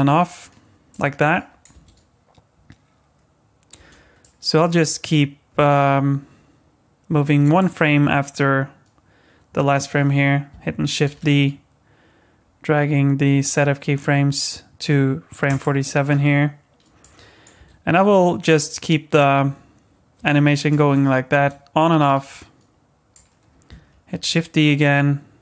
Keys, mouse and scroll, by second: 0.2 space, 0.9 click, 1.7 space, 3.8 space, 4.2 click, 11.0 shift+d, 17.0 click, 17.6 space, 20.2 space, 20.7 space, 21.3 space, 22.0 click, 24.1 shift+d.